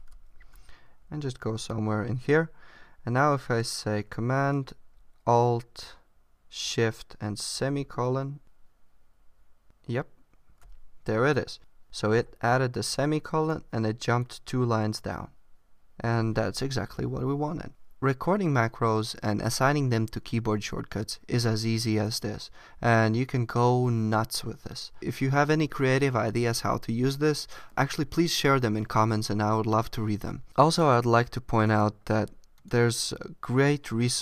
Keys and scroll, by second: 0.3 super+Left, 1.0 Right.